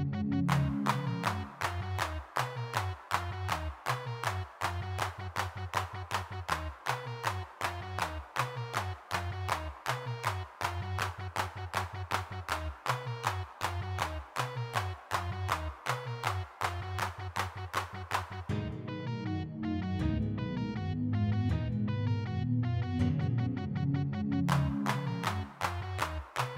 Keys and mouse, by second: 0.5-1.8 middle drag, 2.1 f, 2.4-5.5 drag, 5.5 middle click, 5.6 click, 5.8-7.3 middle drag, 7.3 click, 7.4 f, 7.6-8.6 drag, 8.9 shift+c, 9.1-10.2 drag, 10.8 middle click, 12.3 click, 13.4-14.8 drag, 16.1 click, 17.3-18.7 middle drag, 18.7 g, 19.2 f, 19.8 middle click, 20.6 click, 22.0 click, 23.2 shift+c, 23.4 f, 23.9 click, 24.2-26.0 drag, 26.0 middle click.